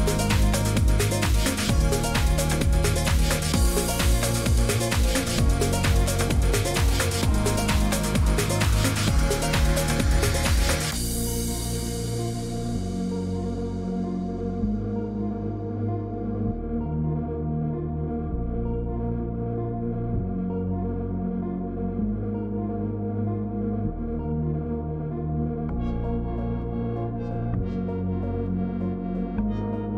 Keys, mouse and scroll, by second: 1.1 shift+click, 2.1 click, 3.9 click, 6.4 click, 9.6 click, 10.0 Escape, 10.5 click, 11.5 click, 11.9-13.2 typing, 12.9-14.5 scroll, 13.7 right click, 14.5 click, 16.4 click, 16.4 ы, 17.8 click, 19.1-26.2 typing, 19.3 click, 20.8 middle click, 23.9 right click, 24.7 click, 27.0 click, 27.6 scroll down 4, 27.6-29.9 typing, 27.9 scroll, 27.9 click, 27.9 scroll down 2, 28.9 click, 29.7 scroll down 7.